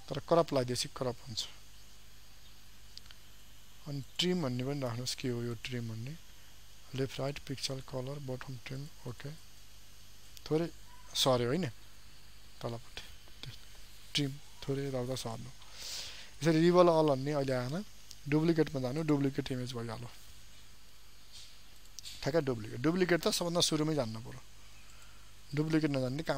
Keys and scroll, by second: 2.5 ctrl+alt+z.